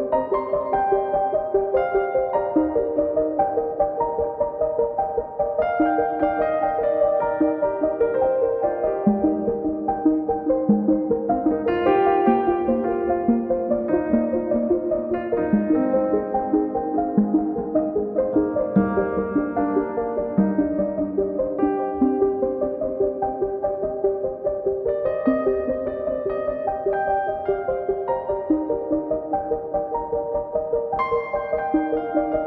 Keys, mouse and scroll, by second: 0.0 s, 0.2 a, 0.3 s, 0.8 click, 1.6 scroll down 3, 1.7 middle click, 1.9-2.5 middle drag, 2.7 KP_1, 2.9-3.2 scroll up 5, 3.3 click, 3.6 scroll down 1, 3.7-4.2 scroll up 4, 3.9 click, 4.2 scroll down 1, 4.6-6.5 drag, 9.4 click, 11.6-12.2 drag, 13.9 click, 16.4-17.0 drag, 17.2 scroll down 3, 17.4 scroll up 4, 17.7 click, 18.3 scroll up 1, 18.4 drag, 18.5 scroll down 8, 18.8 scroll up 1, 19.0 click, 19.5 scroll down 1, 19.6-20.2 middle drag, 20.2 scroll down 1, 20.3 middle click, 20.7 KP_0, 21.4 click, 21.6-22.3 scroll up 10, 21.8 KP_1, 22.4 click, 23.4-24.5 drag, 24.5 BackSpace, 25.4 p, 26.5 click, 26.7 scroll up 7, 26.9 middle click, 28.2 click, 30.1-30.5 scroll down 11, 30.5 click, 31.0 scroll down 3, 31.2 click, 31.7 scroll up 2, 32.0-32.4 middle drag.